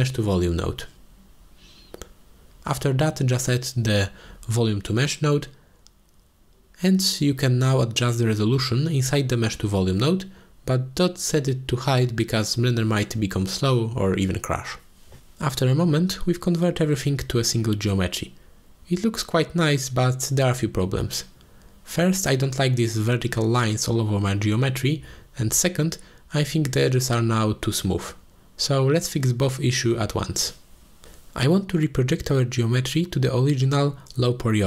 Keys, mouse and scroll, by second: 4.4-6.7 drag, 7.1 click, 8.0 click, 9.8 ctrl+space, 10.1-10.6 middle drag, 11.1-11.5 middle drag, 13.9 ctrl+space, 14.7-16.8 drag, 17.6 scroll down 1, 18.1-19.0 drag, 19.5 ctrl+space, 20.2-20.6 middle drag, 20.6-21.5 drag, 23.4-25.2 middle drag, 25.3 n, 26.1-26.5 middle drag, 28.1-29.0 middle drag, 29.7-31.0 shift+middle drag, 32.0 middle click, 32.7-33.0 shift+middle drag.